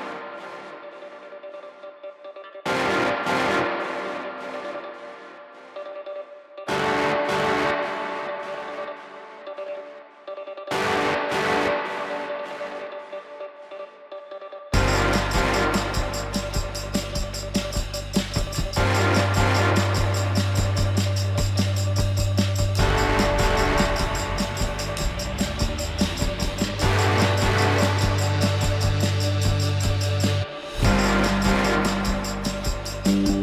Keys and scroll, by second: 0.8 F4.